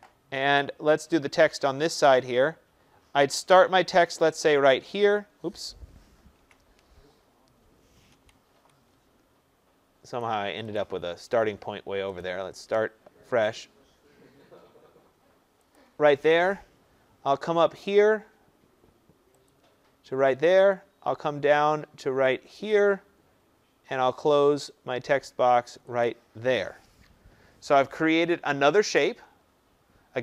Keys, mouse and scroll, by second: 4.5 click, 6.3 ctrl+z, 8.1 Escape, 8.5 Escape, 10.2 click, 10.8 click, 12.2 click, 15.7 click, 19.4 click, 22.7 click, 26.0 click.